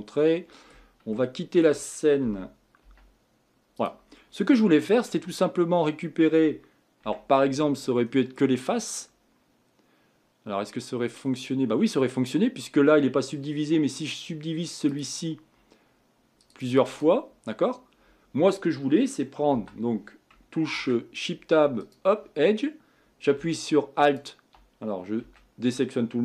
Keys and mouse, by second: 5.4 g, 7.0 Tab, 19.5 2, 20.7 ctrl+Tab, 25.2 a.